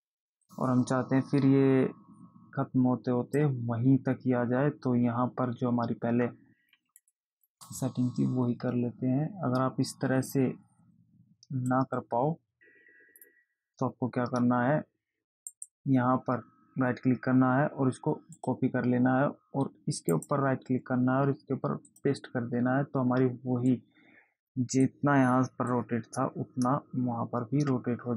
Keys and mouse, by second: 0.1 click, 7.7 click, 13.5 click, 15.9 right click, 18.7 click, 20.5 right click, 22.3 click, 24.1 click, 26.1 click.